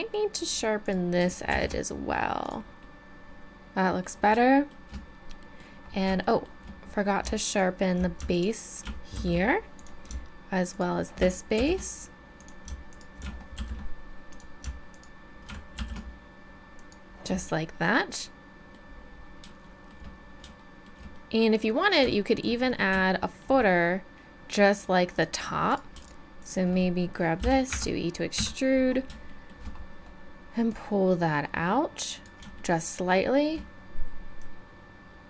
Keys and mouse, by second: 0.3 right click, 1.5 shift+e, 4.6 middle click, 5.3 middle click, 5.6-6.8 middle drag, 9.1 shift+e, 11.5 shift+e, 13.6 shift+e, 15.7 shift+e, 21.5-24.3 middle drag, 25.1 click, 25.7-27.4 right drag, 27.4 e, 28.4 KP_3.